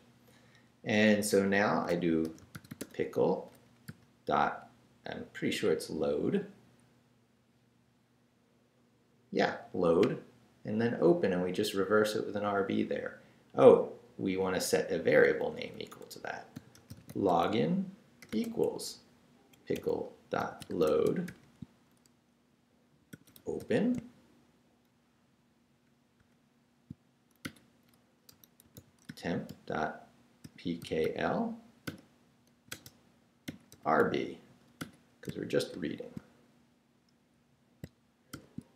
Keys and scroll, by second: 1.7-3.9 typing, 14.8 Left, 16.3-18.3 typing, 18.6 Right, 20.1-21.7 typing, 22.9-23.9 typing, 26.2 shift+9, 27.4-31.5 typing, 33.7-36.2 typing, 38.3 shift+0.